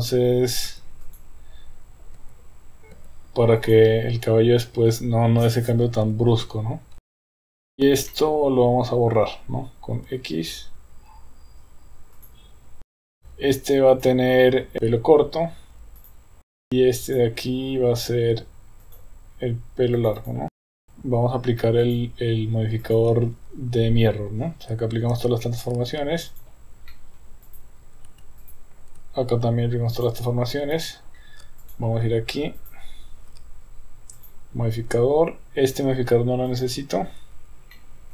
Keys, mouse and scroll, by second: 0.7 Tab, 1.2 click, 2.3 Tab, 3.2 Tab, 3.6 click, 4.8 Tab, 6.4 Tab, 7.0 Tab, 7.1 Tab, 7.3 Tab, 7.6 click, 8.1-9.3 middle drag, 10.1 x, 12.9 KP_1, 13.0 KP_3, 13.1 Tab, 13.7 KP_3, 14.0 click, 16.0-16.7 drag, 17.1 click, 18.8 click, 20.1 click, 20.8 KP_1, 21.8 click, 22.8 click, 25.1 ctrl+a, 26.9 middle drag, 27.5 click, 29.4 ctrl+a, 30.7 KP_1, 31.6 click, 32.7 click, 34.2 click, 36.5 click, 37.7-38.1 middle drag.